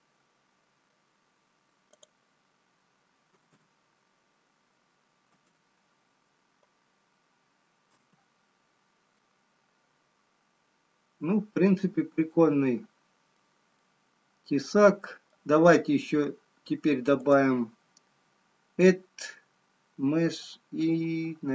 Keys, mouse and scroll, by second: 1.4-3.6 scroll down 2, 3.6 click, 3.6 scroll down 1.